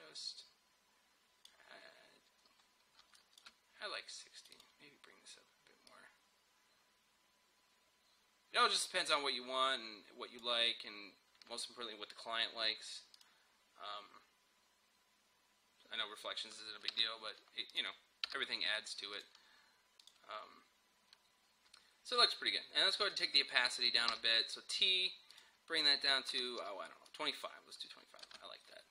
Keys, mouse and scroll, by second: 2.7-3.0 scroll up 1, 3.0 space, 3.2-13.0 drag, 13.2 click, 17.0 Return, 17.8 click, 18.3 Return, 19.2 click, 23.2 click, 24.2 t, 25.4 click, 26.4-26.7 typing, 27.1 click, 28.3 space.